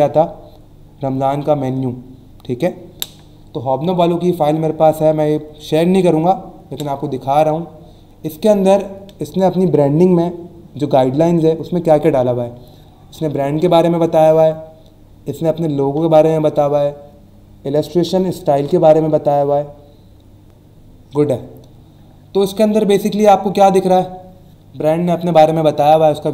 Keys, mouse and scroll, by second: 3.2 scroll down 1, 4.0 scroll down 1, 6.5 scroll down 1, 7.2 scroll down 1, 7.7 scroll down 1, 22.5 scroll down 1, 23.1 scroll down 1.